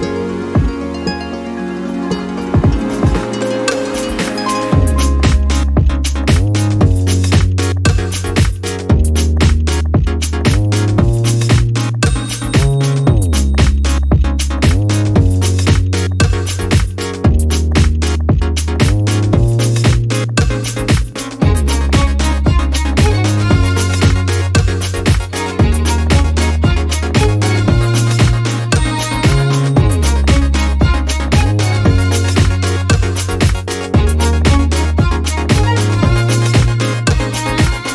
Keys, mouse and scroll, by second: 3.2 click, 4.1 click, 5.6 Delete, 7.4 click, 8.5 Up, 10.7 alt+Down, 13.0 click, 14.0 click, 14.9 Down, 16.1 Down, 17.7 click, 18.9 click, 20.9 ctrl+d, 22.0-23.4 ctrl+shift+drag, 24.1-25.5 drag, 25.6 click, 27.1 ctrl+d, 28.2 shift+click, 31.4 click, 33.1 shift+click, 34.6 click, 35.2 ctrl+d, 36.3 click, 37.0 click, 37.7-37.9 ctrl+scroll down 3.